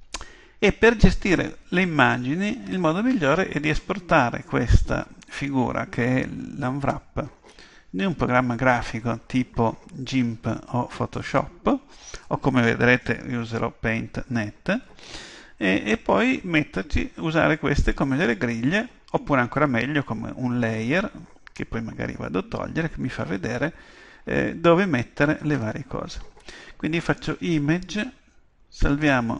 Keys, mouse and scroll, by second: 27.0-28.9 drag.